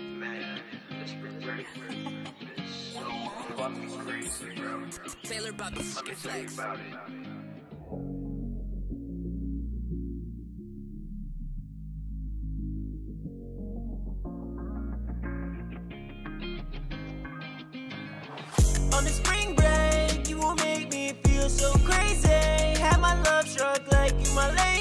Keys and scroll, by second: 12.7 super+s, 13.9 super+s, 16.4 super+Tab, 20.1 super+Tab.